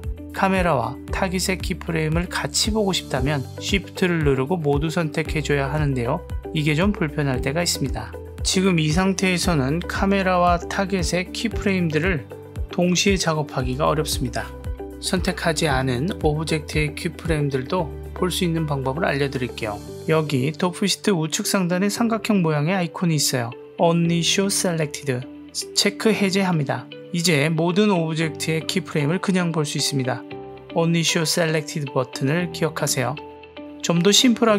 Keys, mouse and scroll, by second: 5.0 shift+click, 8.1 click, 9.7 click, 13.1 click, 14.4 click, 15.9 click, 16.9 click, 26.1 click, 31.9 click.